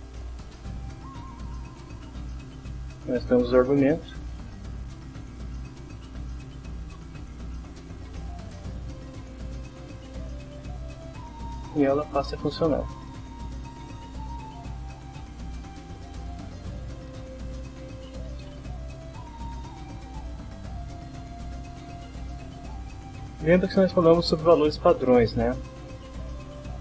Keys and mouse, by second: 1.6 click, 2.8 click, 4.4 shift+', 5.7 shift+;, 6.0 shift+p, 6.9 shift+', 7.6 shift+Up, 8.6 F6, 10.3 click, 11.1 click, 13.8 click, 14.9 click, 16.2 click, 17.4-18.4 typing, 19.4 Down, 20.0 Down, 20.8 Down, 22.4-23.6 drag, 26.3-26.8 drag.